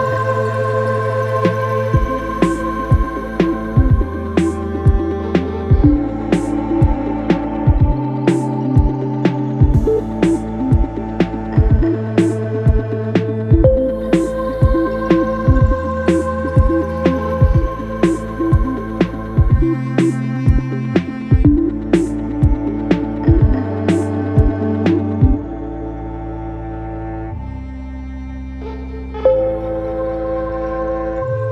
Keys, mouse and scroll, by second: 0.0 s, 1.2 g, 3.4 Tab, 4.4 click, 5.2 g, 7.9 click, 8.4 g, 10.7 click, 11.2 g, 12.7 click, 13.1 g, 16.7 Tab, 17.7-19.5 scroll up 1, 19.5 ctrl+a, 22.5-23.6 scroll up 3, 23.6-26.6 drag, 27.1-30.2 drag, 31.2-31.5 scroll down 3.